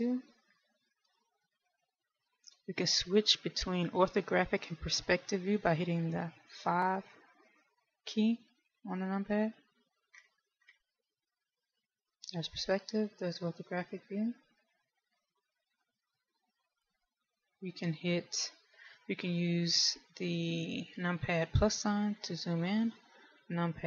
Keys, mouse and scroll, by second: 0.3 KP_2, 0.5 KP_2, 1.5 KP_1, 8.8 KP_5, 10.0 KP_5, 10.5-11.6 scroll down 5, 11.6 KP_5, 13.5 KP_5, 14.8-16.0 scroll up 5, 16.0-16.5 scroll up 1, 22.8 KP_Add, 23.5 KP_Add.